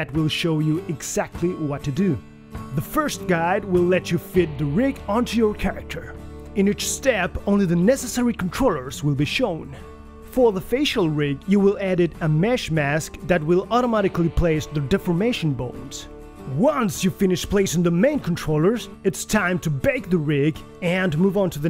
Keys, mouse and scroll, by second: 0.2 shift+click, 2.7 click, 3.7 shift+middle click, 3.9 scroll up 4, 4.0 click, 4.4-4.8 scroll down 2, 4.6 click, 5.1 scroll down 2, 5.4 shift+middle click, 5.5 s, 6.6 click, 6.8 click, 7.6 click, 8.1 click, 8.8 click, 9.0 click, 9.2-11.7 typing, 9.6 click, 10.7 click, 11.6 click, 12.0 scroll up 4, 12.2 click, 12.5 shift+middle click, 12.7 click, 12.8 click, 12.9 click, 13.2 click, 14.1 scroll down 2, 14.2 middle click, 15.2 click, 15.4 click, 15.7 click, 16.0 KP_1, 16.1 click, 16.3 scroll up 6, 16.6 right click, 16.7 click, 17.0 right click, 17.0 click, 17.4 click, 17.8 click, 18.1 scroll up 4, 18.3 click, 18.4 g, 19.2 scroll down 1, 19.2 shift+middle click, 19.4 click, 19.4 scroll up 1, 19.7 KP_3, 19.8 click, 20.2 click, 20.6 click.